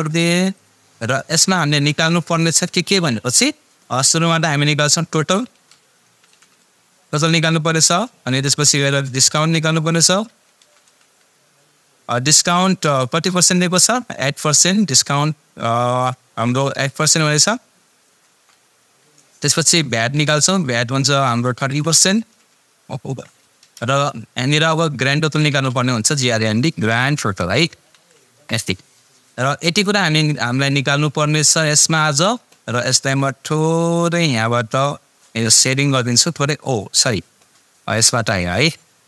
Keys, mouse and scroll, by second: 5.2 shift+Num_Lock, 5.3-6.8 typing, 7.8 Return, 8.0-11.5 typing, 14.6 space, 17.6 space, 18.0 shift+5, 18.3 Return, 19.5-21.1 typing, 23.1 shift+5, 25.2-28.5 typing, 30.2-31.8 drag, 34.5 click, 37.0 click.